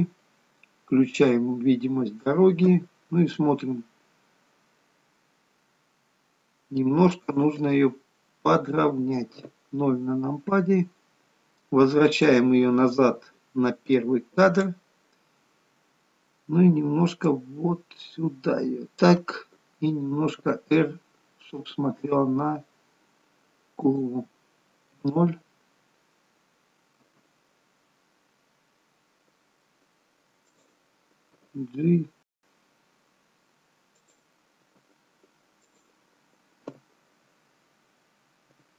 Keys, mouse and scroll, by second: 1.4 click, 3.3 space, 7.8 space, 9.4 KP_0, 10.8-12.6 scroll down 2, 12.6 click, 12.6-14.0 scroll down 3, 17.4 click, 20.3 r, 25.1 KP_0, 27.1 r, 33.1 g, 36.5 KP_0, 38.5 r.